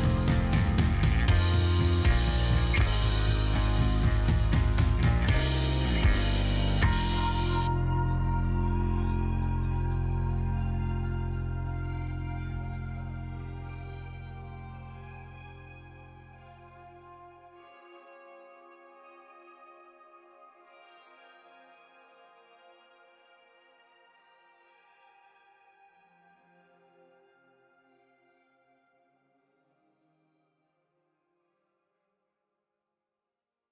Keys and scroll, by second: 1.1 space, 1.6 c, 2.2 space, 4.3 q, 6.3 space, 7.2 space, 7.9 space, 9.4 space, 10.0 space, 12.8 s, 13.5 z, 17.8 space, 18.4 space, 19.2 c, 19.8 z, 21.3 z, 26.7 q.